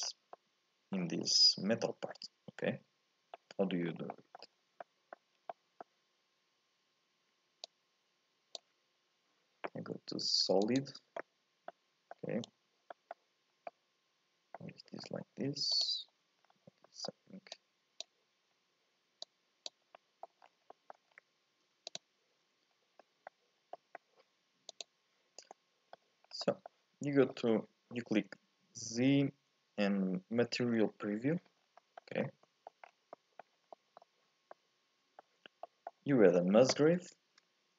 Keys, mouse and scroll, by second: 0.1 scroll down 1, 0.3 middle click, 1.1-2.2 scroll up 2, 2.2-3.9 middle drag, 3.9 scroll down 4, 4.2 middle click, 4.6 scroll up 1, 4.9 middle click, 5.4 scroll down 2, 5.5-7.7 middle drag, 7.7-9.0 drag, 9.0-10.6 scroll up 2, 10.6 click, 11.7 middle click, 12.5-12.9 scroll up 2, 12.9 middle click, 13.5 scroll up 1, 13.6-15.0 middle drag, 15.0-15.7 scroll up 1, 15.7 ctrl+shift+click, 16.4-16.8 scroll up 2, 16.8 middle click, 17.5 click, 18.5 scroll up 1, 19.2 click, 19.9 middle click, 20.4 scroll down 1, 20.7 middle click, 21.1-21.9 scroll up 1, 21.9 ctrl+shift+click, 22.7 scroll up 1, 23.0-24.8 middle drag, 24.8 click, 25.4 scroll down 1, 25.5 middle click, 26.2 scroll up 2, 26.4-28.2 middle drag, 28.2 z, 31.6 scroll down 1, 31.8 middle click, 32.2 scroll up 1, 32.4 middle click, 32.9 scroll up 1, 33.1 middle click, 33.6 scroll down 1, 33.7-37.1 middle drag, 37.1 shift+a.